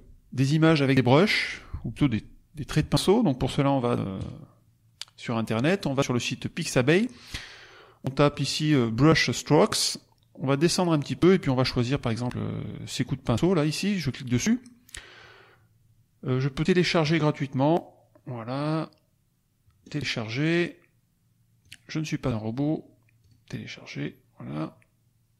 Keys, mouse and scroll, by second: 4.1 click, 8.2 click, 9.8-10.2 scroll down 2, 10.4-11.4 scroll down 4, 13.3 click, 17.0 click, 19.7 click, 21.6 click, 23.1 click.